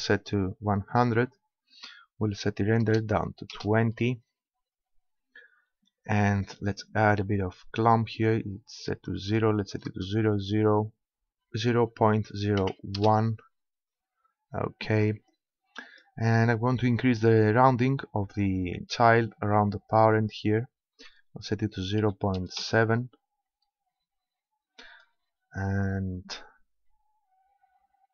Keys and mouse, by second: 1.0-2.6 drag, 6.4-8.2 drag, 15.3-17.0 drag, 19.9-21.6 drag.